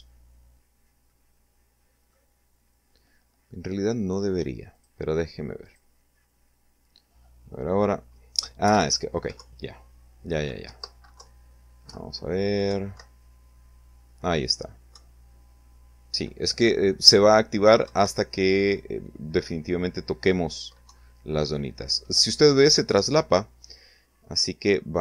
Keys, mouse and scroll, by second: 0.1-1.3 middle drag, 3.7 click, 4.7 click, 7.6 p, 7.9 Up, 8.4 Left, 9.6 Up, 10.2 Left, 10.9 Up, 11.7 Right, 13.9 Right, 16.8 Right, 19.9 Down, 21.8 Escape.